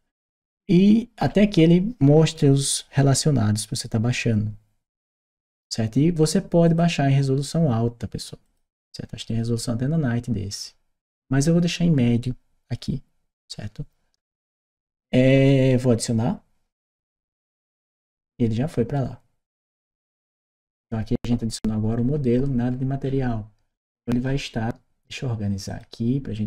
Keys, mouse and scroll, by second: 1.0-4.9 scroll down 1, 4.9-5.7 scroll up 1, 6.4 click, 8.2 click, 11.0 middle click, 16.7 click, 20.0 click, 21.9 scroll up 2, 22.4 scroll up 2, 24.0-24.3 scroll up 2, 25.5 click.